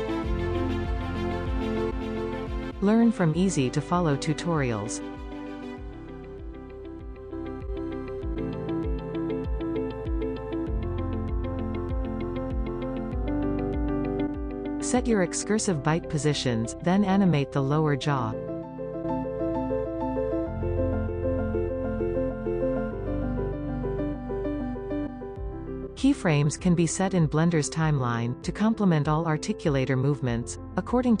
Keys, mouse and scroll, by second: 0.1 scroll up 5, 0.4-3.8 shift+middle drag, 3.0 click, 3.5 scroll down 1, 5.8-9.7 shift+middle drag, 10.1 click, 11.5 click, 12.4 click, 14.8 click, 18.3-20.7 drag, 22.0-22.6 scroll down 6, 22.6 middle drag, 22.8 scroll up 1, 23.0-23.9 shift+middle drag, 23.9-24.2 scroll up 2, 25.3-28.5 drag, 28.3 scroll down 2, 28.9-31.2 middle drag.